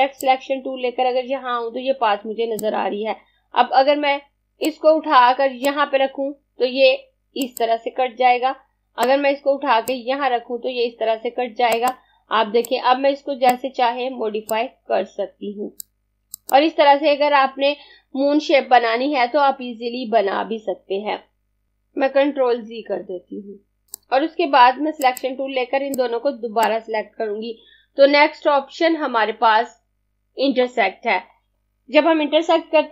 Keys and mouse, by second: 3.5 z, 4.7 click, 22.4 z, 23.2 z, 23.9 click.